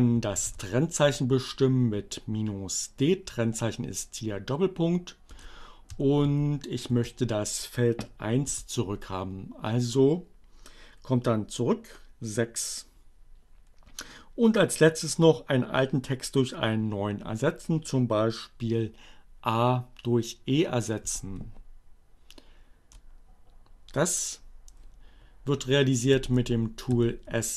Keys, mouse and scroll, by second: 0.3 shift+., 4.8 space, 5.0 f, 7.4 Return, 20.0 Up, 21.3 BackSpace, 25.3 s, 25.5 d.